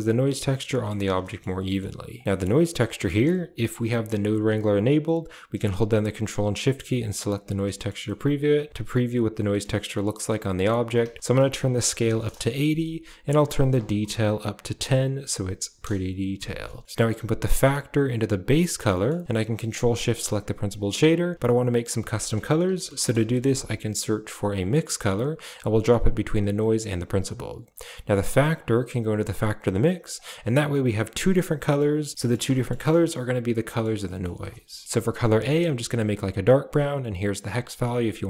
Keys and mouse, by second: 0.5 middle drag, 1.1 shift+middle click, 1.5 middle click, 2.1 click, 2.2 middle click, 2.3 click, 6.9 ctrl+shift+click, 7.7 shift+middle click, 8.1-8.7 middle drag, 9.4 middle click, 10.5-12.1 drag, 13.3 click, 17.4-18.5 drag, 18.8 middle click, 19.9 click, 22.0 shift+a, 26.5 click, 28.5-29.3 drag, 30.0 click, 32.1 ctrl+drag, 32.5 shift+middle click, 33.6 click, 33.9 click, 34.0 middle click, 35.2 click.